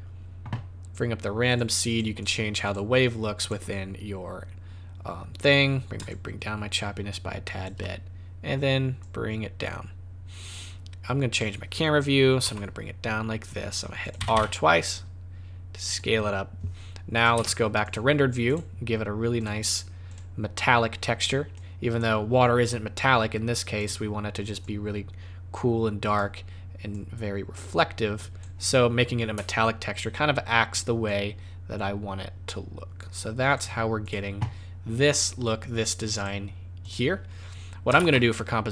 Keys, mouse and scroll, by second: 1.4 click, 1.8 click, 2.2 click, 2.7 click, 3.4 click, 6.0 shift+click, 9.0 click, 11.3 click, 12.4 g, 14.1 r, 17.1 click, 17.3 z, 18.4 click, 19.3 click, 20.1 click, 21.5 click, 23.8 click, 26.9 click, 31.0 click, 34.0 click, 36.1 click, 36.8 click, 37.9 shift+a.